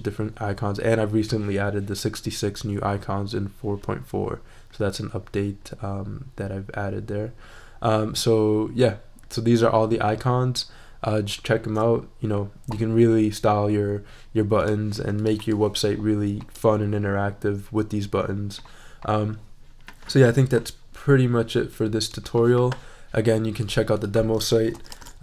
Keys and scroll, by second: 24.5-25.2 typing.